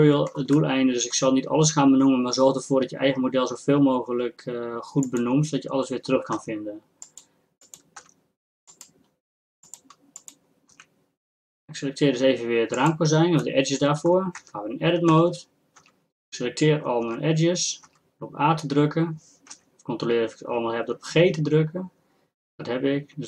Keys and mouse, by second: 5.0-7.2 drag, 6.6 g, 7.6-9.7 drag, 8.0 g, 9.7-12.5 drag, 14.0-15.4 drag, 14.4 Tab, 15.4 a, 15.4 a, 16.0 a, 18.1 a, 19.9 g.